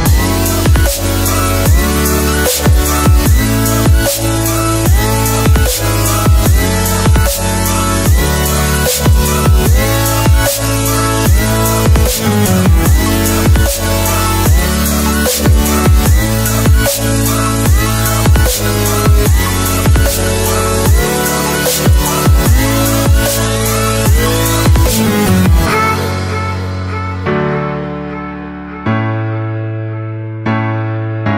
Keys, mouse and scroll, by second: 0.9 click, 2.2 Delete, 3.6 click, 4.1 Delete, 6.4 ctrl+s, 12.5 click, 16.3 s, 18.9 s, 20.6 click, 29.1 click.